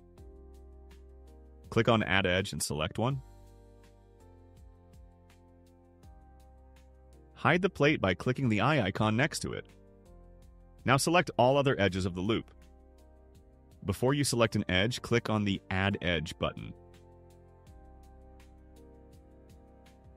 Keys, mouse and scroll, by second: 3.4 click, 5.3 click, 7.6 click, 8.5 click, 10.3 click, 11.6 click, 12.4 click, 13.3 click, 13.8 click, 14.7 click, 15.4 click, 16.3 click, 16.9 click, 19.9 scroll down 2.